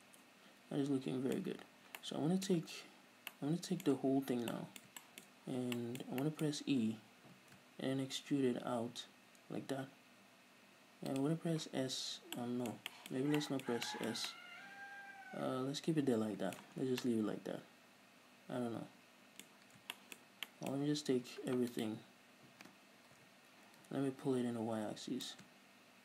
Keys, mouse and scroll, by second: 0.3-1.7 middle drag, 2.3 middle click, 3.1-3.6 scroll down 2, 3.8-5.3 middle drag, 4.3 a, 5.6 middle click, 5.6 scroll up 2, 6.0-11.6 shift+middle drag, 7.6 e, 11.6 shift+click, 12.4 scroll down 1, 12.7 middle drag, 13.4-15.0 middle drag, 15.2-22.1 middle drag, 17.0 Tab, 17.1-17.4 scroll down 2, 19.9-20.3 scroll up 2, 21.3-22.1 scroll up 2, 22.1 right click, 23.6 l, 25.6-26.0 drag.